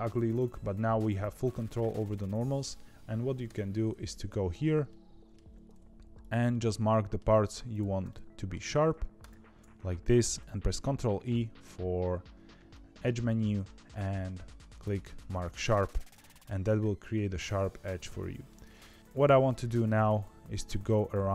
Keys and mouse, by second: 3.4 Tab, 4.8 middle click, 6.4 middle click, 7.7 click, 8.0 middle click, 10.6 ctrl+e, 15.4 middle click, 15.8 Tab, 16.1 middle click, 17.4-18.4 middle drag, 18.6 Tab, 19.1 middle click, 20.6 middle click, 21.2 ctrl+e.